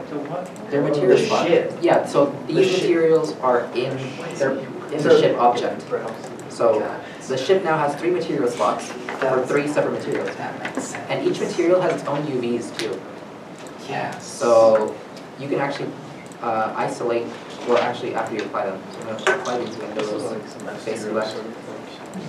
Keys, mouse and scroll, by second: 15.5 Tab, 16.4 scroll up 1, 17.3 alt+a, 18.7 shift+middle click, 18.9 scroll up 1, 20.3 3, 21.7 shift+click.